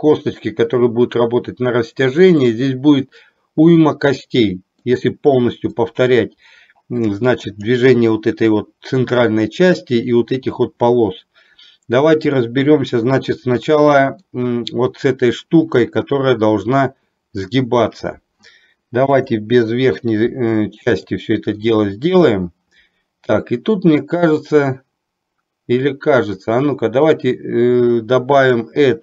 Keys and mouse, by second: 2.5-5.0 middle drag, 5.9-7.1 middle drag, 7.6 click, 12.4-14.4 middle drag, 19.1 KP_7, 21.1-21.7 shift+middle drag, 28.5-29.0 drag.